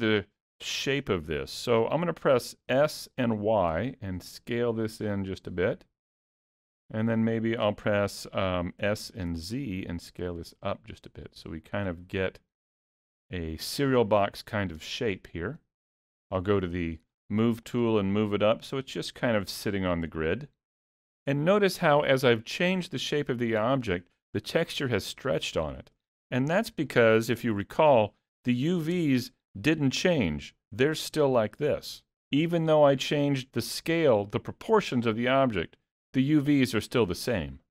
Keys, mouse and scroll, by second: 2.7 s, 8.8 s, 13.7 middle click, 16.5 click, 17.7 click, 19.7 middle click, 26.4-26.8 scroll down 3, 26.9 shift+middle click, 27.8-28.2 scroll up 1, 29.0 Tab, 30.2 a, 34.6 middle click.